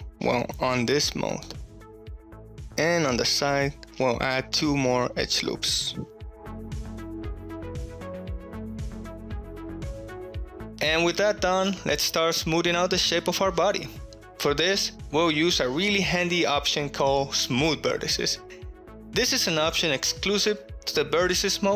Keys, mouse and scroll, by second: 0.3 right click, 1.3-1.7 shift+middle drag, 2.0-2.4 ctrl+middle drag, 2.5 shift+middle click, 4.1 middle click, 5.2 ctrl+r, 7.7 right click, 8.8-10.5 middle drag, 12.0-13.1 middle drag, 15.3 shift+middle click, 16.4 shift+middle click.